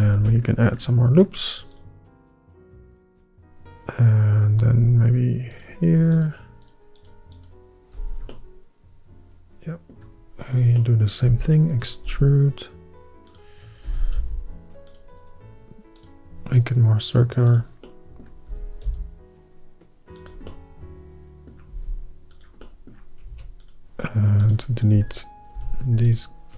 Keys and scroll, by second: 0.3 ctrl+r, 11.4 e, 12.1 s, 14.0 s, 14.7 s, 18.6 s, 21.8 s, 23.4 ctrl+r.